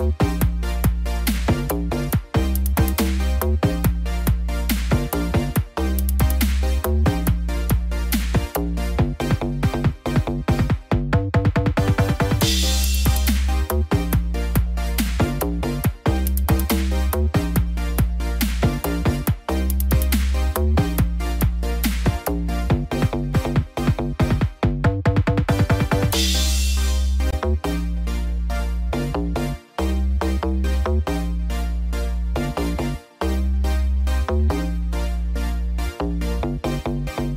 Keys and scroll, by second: 8.4 ctrl+t, 13.9 ctrl+-, 14.7 ctrl+0, 35.8 ctrl+=.